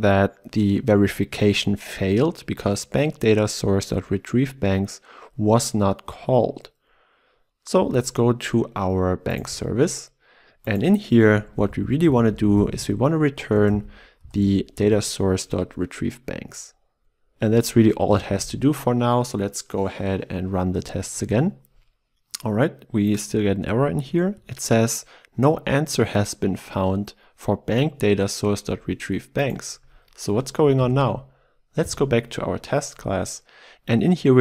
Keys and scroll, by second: 9.5 ctrl+b, 11.7 ctrl+BackSpace, 16.1 Return, 18.1 shift+F10, 30.9 ctrl+e.